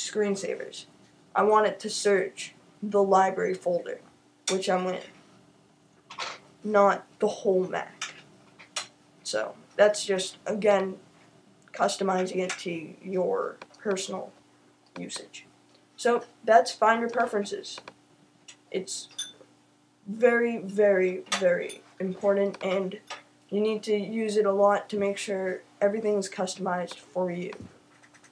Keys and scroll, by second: 0.0-2.7 typing, 4.8-6.9 typing.